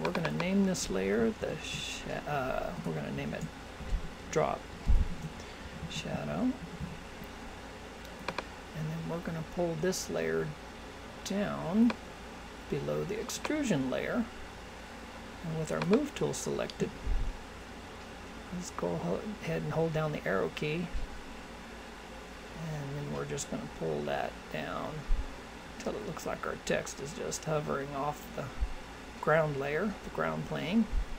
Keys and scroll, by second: 1.4 shift+s, 3.3 shift+d, 5.1 shift+s.